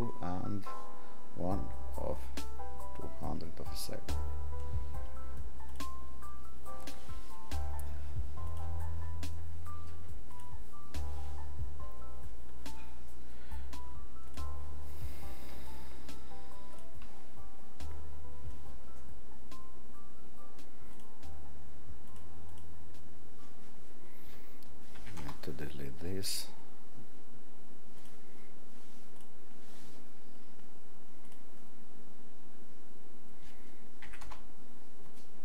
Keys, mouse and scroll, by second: 14.2 click, 29.3 click.